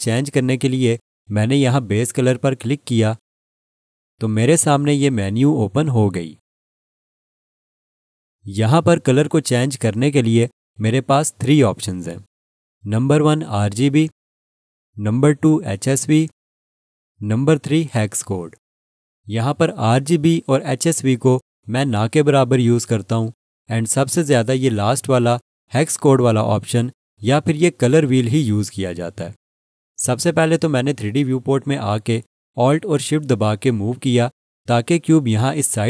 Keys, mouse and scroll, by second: 3.2 click, 14.5 click, 32.8 click.